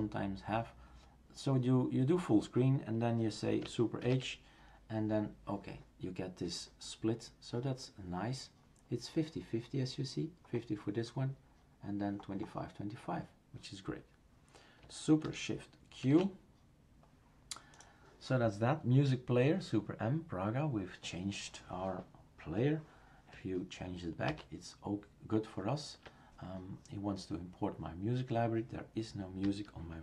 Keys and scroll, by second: 4.0 super+h, 16.0 shift+super+q, 24.3 super+m.